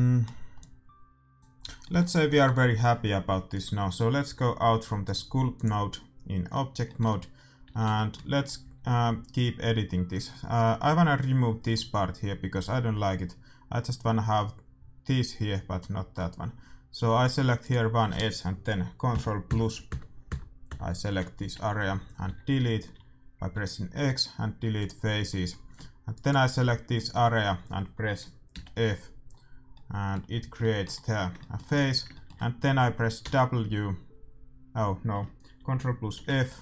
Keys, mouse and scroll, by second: 0.5-2.5 drag, 5.6-6.9 drag, 6.2 middle click, 7.7 Tab, 8.6 a, 9.1 a, 10.3-12.2 middle drag, 12.6-17.6 middle drag, 17.6-19.4 right drag, 19.1 ctrl+KP_Add, 21.3 z, 21.9 z, 22.2 x, 26.1-28.0 right drag, 27.8-36.1 middle drag, 28.7 f, 33.2 w, 36.1 ctrl+f.